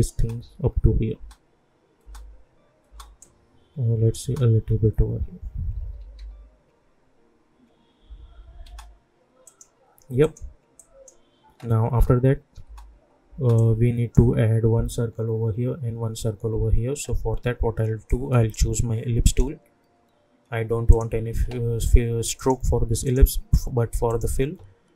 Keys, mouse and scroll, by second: 0.1 space, 3.2 click, 4.2 space, 5.8 -, 6.0 -, 6.1 -, 8.6 space, 9.4 click, 11.9-12.2 scroll up 1, 12.6 space, 13.5-16.3 drag, 18.0-24.9 drag.